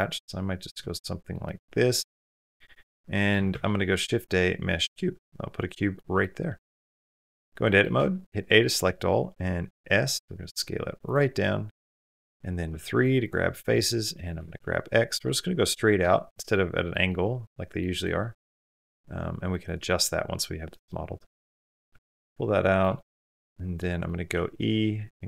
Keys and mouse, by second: 0.8-1.1 middle drag, 1.3-1.9 middle drag, 2.0-3.1 middle drag, 3.3 shift+a, 5.0 click, 5.9 click, 6.6-7.0 middle drag, 7.0 Tab, 7.5 middle click, 7.8 a, 8.0 middle click, 9.5 s, 12.0 shift+middle click, 12.0 shift+click, 12.5 3, 13.5 middle click, 14.2 g, 16.7 middle click, 17.3 middle click, 18.3 s, 19.7-20.7 middle drag, 21.0 middle click, 21.3 middle click, 22.0 middle click, 22.8 shift+middle click, 23.0 middle click, 24.1 middle click, 24.1 e.